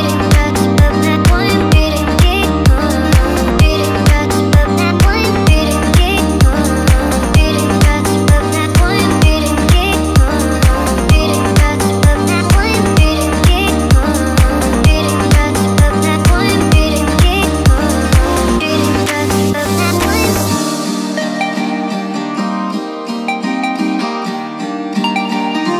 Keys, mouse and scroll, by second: 0.3 i, 1.6 click, 2.6 click, 3.9-5.0 middle drag, 5.0-6.5 drag, 7.3-8.5 drag, 9.3-11.3 middle drag, 11.3 click, 12.0 shift+click, 12.4 shift+click, 12.8 shift+click, 13.3 shift+drag, 16.4 click, 17.3 click, 20.5 click, 21.3-22.3 drag, 22.9-23.5 middle drag, 24.3 middle click, 25.1-25.7 drag.